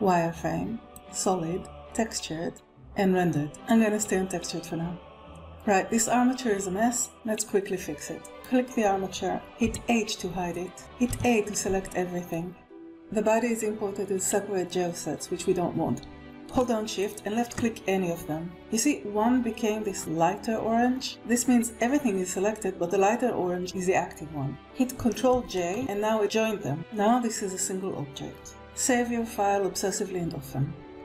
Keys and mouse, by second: 0.9-2.7 drag, 8.9 click, 10.2 h, 11.6 a, 12.9-13.2 middle drag, 16.8 a, 17.6 shift+click, 24.6 ctrl+j, 26.0 Escape.